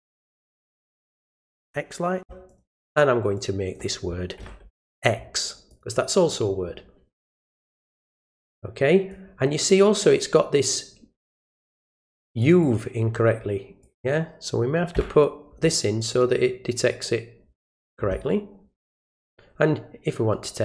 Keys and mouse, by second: 0.2 click, 1.5 click, 2.5 click, 2.7 click, 3.3 click, 5.7 click, 7.8-9.1 drag, 12.4 click, 12.6 click, 13.8 click, 16.1 click, 18.9 click, 20.3 right click.